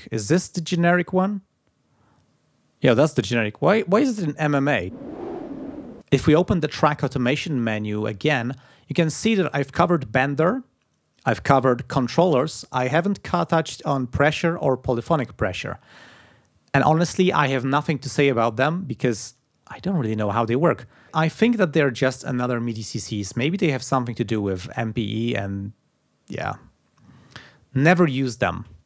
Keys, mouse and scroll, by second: 0.0 click, 5.9 click, 7.6 click.